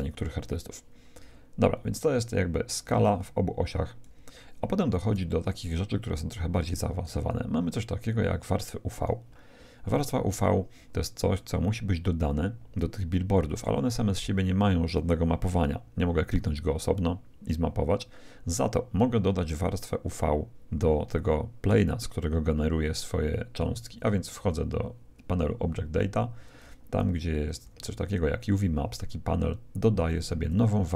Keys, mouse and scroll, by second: 0.0 Escape, 0.0-1.3 middle drag, 1.6-4.9 drag, 6.5-8.3 drag, 11.3-13.3 middle drag, 24.3-26.3 drag, 26.9 a, 27.6 a, 30.5-30.9 drag.